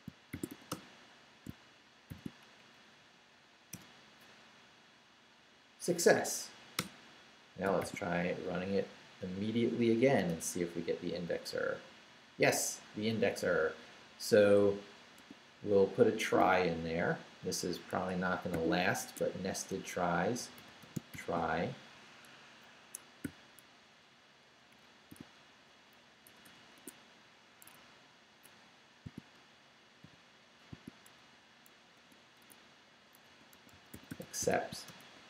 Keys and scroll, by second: 0.0-1.0 typing, 1.5 shift+Return, 2.1 shift+;, 2.6 shift+Up, 3.7 Return, 6.8 Return, 7.7 shift+Return, 7.8 shift+;, 8.3 shift+Up, 10.2 Return, 15.2 q, 16.2 Down, 17.9 Escape, 18.5 o, 19.0 Tab, 20.1-21.6 typing, 21.9 shift+Down, 22.8 Escape, 23.2 o, 24.7 Up, 25.2 Tab, 26.2 BackSpace, 26.7 Tab, 27.6 Escape, 28.5 Down, 29.1 shift+Down, 30.0 shift+i, 31.9 Tab, 33.0-35.2 typing, 35.1 Tab.